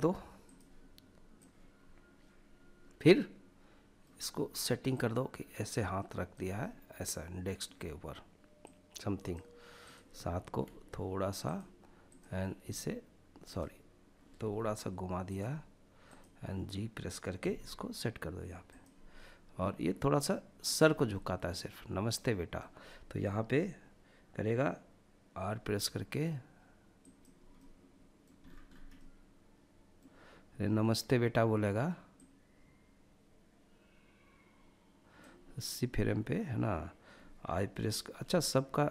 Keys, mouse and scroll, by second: 2.1-3.1 middle drag, 4.0 click, 5.7-6.8 middle drag, 7.7 click, 9.0 drag, 9.5 g, 10.6-11.3 drag, 11.8 g, 12.6 right click, 13.5 r, 14.4 click, 15.2 click, 16.5 g, 17.8-18.2 drag, 19.8 drag, 20.2-21.7 middle drag, 24.8 r, 26.1 click, 26.7-27.4 middle drag, 27.5-28.0 scroll down 4, 28.0-29.1 middle drag, 31.4-34.4 drag, 38.8 i.